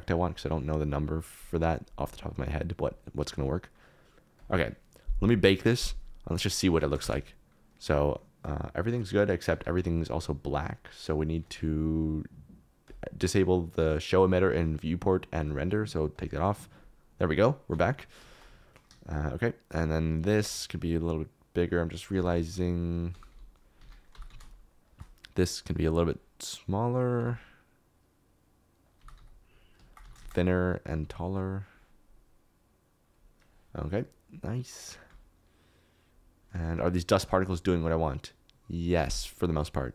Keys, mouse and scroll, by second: 0.8 click, 2.0 click, 3.5 click, 4.4 click, 7.0 space, 7.6-8.8 middle drag, 8.0 space, 8.8 shift+click, 9.7 ctrl+b, 16.1 click, 18.1 shift+middle click, 19.3 click, 20.2 s, 22.1 Escape, 22.5-24.2 typing, 23.8 Escape, 24.9 shift+click, 26.7 click, 27.1 s, 28.9 click, 28.9-31.0 typing, 31.6 click, 35.3 space, 36.6 space, 37.1 shift+space, 37.2 shift+middle click.